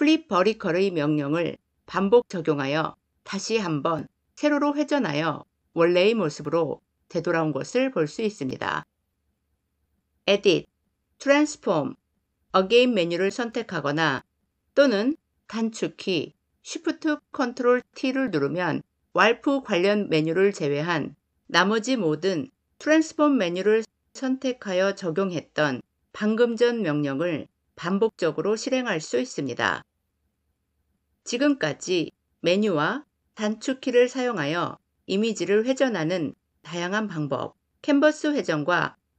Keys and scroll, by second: 16.2 ctrl+shift+t.